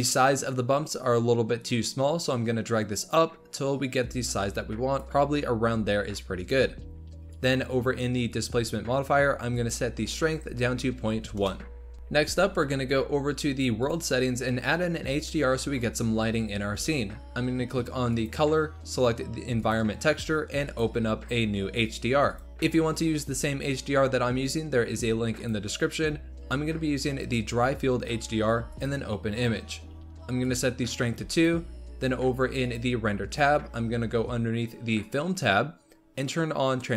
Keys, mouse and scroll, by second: 2.2 click, 7.2 click, 9.5-11.9 drag, 13.7 click, 15.6-16.0 scroll down 2, 16.0-18.0 scroll up 2, 18.0-23.1 drag, 30.4-31.4 drag, 32.5 click, 34.9-36.9 drag.